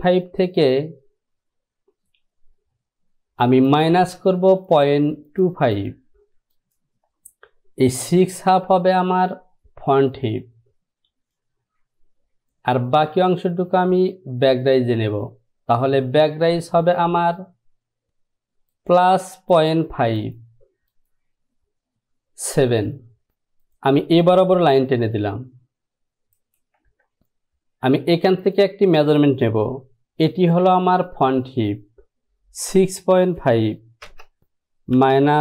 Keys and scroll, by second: 27.2 ctrl+z, 32.7-34.2 typing.